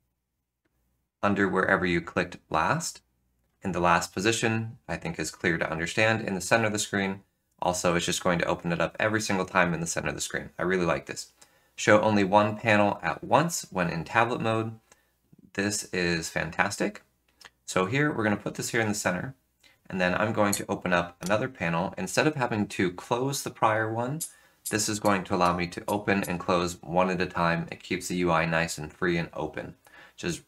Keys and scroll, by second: 0.0 F7, 1.5 F7, 2.0 F7, 20.2 F8, 21.2 F5, 24.1 F4, 24.6 F4, 25.0 F8, 25.3 F5, 25.8 F4, 26.1 F4.